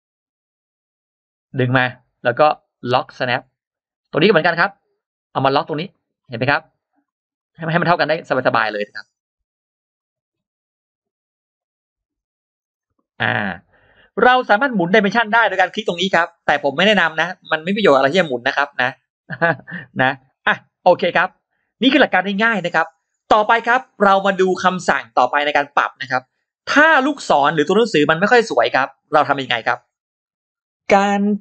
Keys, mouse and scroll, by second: 0.1 click, 1.9-2.9 drag, 4.3-5.5 drag, 5.8 click, 6.1-6.4 scroll down 2, 6.5 click, 6.9-7.3 scroll up 2, 8.6 click, 9.8 click, 10.1-10.4 scroll down 1, 11.4-12.6 drag, 12.8 click, 13.7 click, 15.5-15.8 scroll up 1, 18.6 click, 19.2 click, 19.5-20.5 scroll down 3, 20.7 scroll up 2, 26.7-27.3 scroll up 2, 27.9-28.2 scroll down 2, 28.5-28.8 scroll down 2.